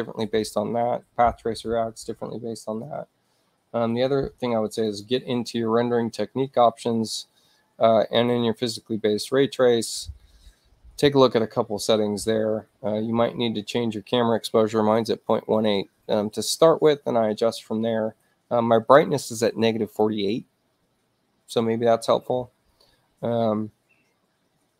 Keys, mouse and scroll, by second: 4.8 click, 8.1 click.